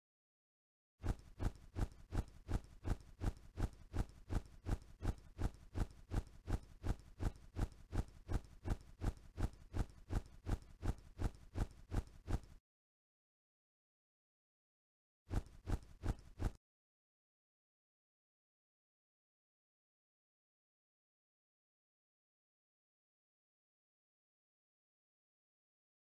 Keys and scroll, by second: 0.7-2.5 typing, 4.2 m, 4.5 s, 5.1 m, 5.6 d, 8.4-12.0 typing, 13.3-16.0 typing, 17.6 o, 18.6 c, 21.8 c.